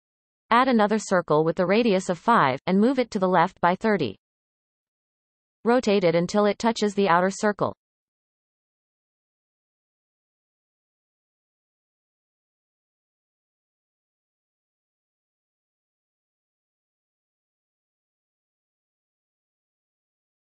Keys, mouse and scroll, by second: 1.8-3.8 drag, 3.8 g, 6.4 shift+middle click, 7.2 r, 10.6 shift+middle click, 11.0-11.7 scroll up 5, 11.7-12.7 shift+middle drag, 12.7-13.5 scroll up 4, 13.5 shift+middle click, 13.9 scroll up 1, 14.9 r, 17.3-17.7 shift+middle drag, 17.7-19.9 scroll up 9, 19.9 r.